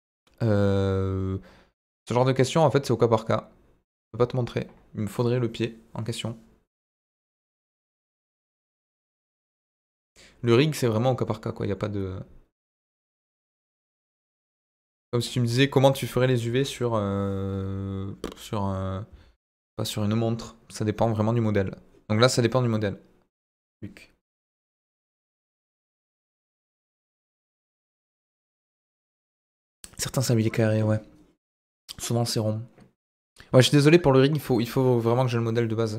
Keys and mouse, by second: 0.1 click.